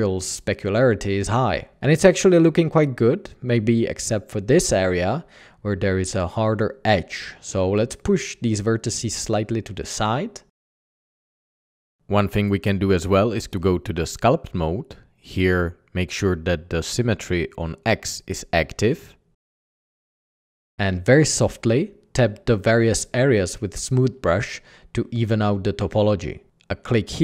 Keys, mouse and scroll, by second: 6.0 Tab, 9.7 typing, 10.8 typing, 12.6 ctrl+Tab, 14.1 ctrl+a, 14.3 ctrl+t, 16.4-18.9 middle drag, 26.1 f, 26.2 ctrl+z.